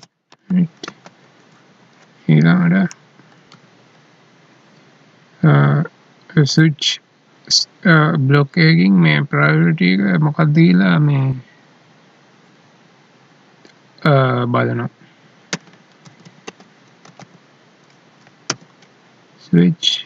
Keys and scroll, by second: 0.9 ctrl+s, 3.6 alt+e.